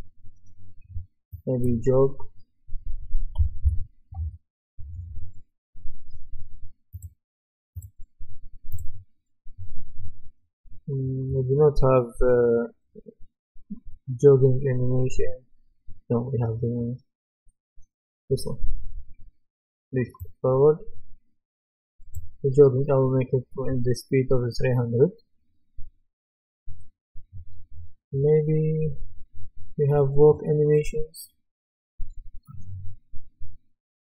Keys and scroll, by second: 3.4-4.1 typing.